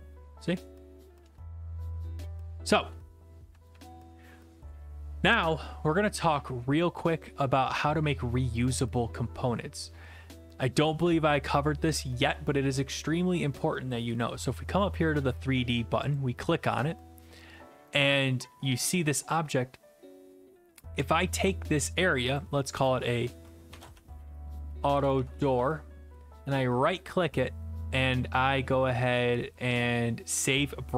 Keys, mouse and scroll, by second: 4.4 alt+F4, 8.7 click, 18.0-18.8 s, 18.8 d, 19.1 right click, 21.1 click, 22.4 click, 23.5-26.3 typing, 26.6 right click.